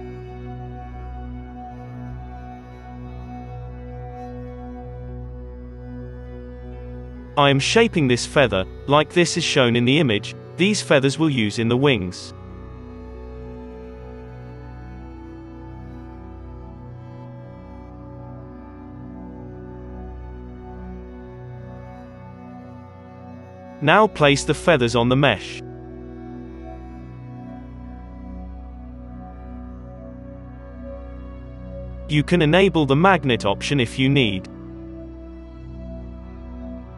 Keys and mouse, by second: 0.0-1.4 typing, 0.1 Tab, 0.1-1.4 middle drag, 1.4-2.7 drag, 3.7-6.9 middle drag, 3.7 g, 6.9 ctrl+z, 6.9-8.7 drag, 7.6 g, 9.3 1, 9.7 alt+a, 9.9-11.6 drag, 10.1 g, 10.8 Tab, 11.4 Tab, 11.9-13.6 drag, 12.8 g, 13.4 Tab, 14.1 Tab, 14.1 middle click, 14.3-16.1 drag, 14.5 g, 14.8 Tab, 16.1 Tab, 16.4 alt+a, 16.8-18.4 drag, 17.4 Tab, 18.0 alt+a, 18.7-20.3 drag, 18.9 s, 20.2 ctrl+s, 20.7 alt+a, 21.8 KP_3, 23.2-26.0 drag, 23.5 KP_3, 24.0 shift+d, 24.7 r, 26.0 middle click, 26.3-27.4 middle drag, 26.6-30.6 typing, 27.4 click, 32.5-34.5 drag, 34.5 middle click, 34.5 g, 35.4 KP_Decimal, 36.2 KP_3.